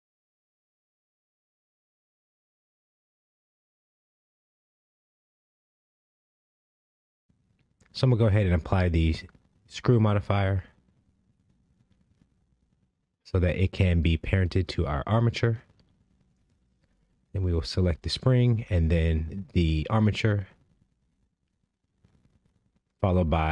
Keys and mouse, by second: 2.4 ctrl+Tab, 4.3 Tab, 6.8 click, 8.4-9.0 drag, 19.1 shift+click.